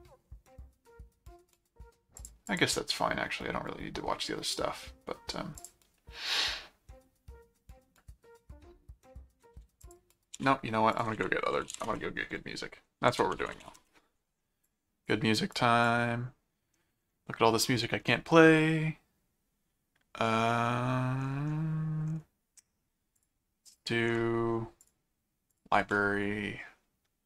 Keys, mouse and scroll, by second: 2.1 click, 5.6 click, 9.8 ctrl+click, 10.3 ctrl+w, 10.9 ctrl+click, 11.1 ctrl+t, 11.3-14.2 typing, 13.1 alt+d, 14.6 click, 15.5 click, 23.2 click, 24.8 click, 25.5 click.